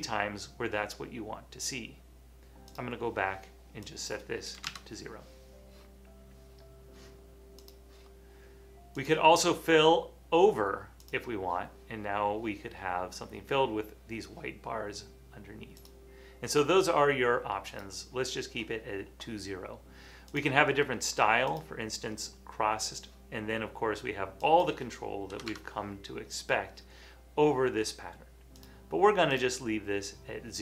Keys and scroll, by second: 4.7 shift+Return, 25.5 2.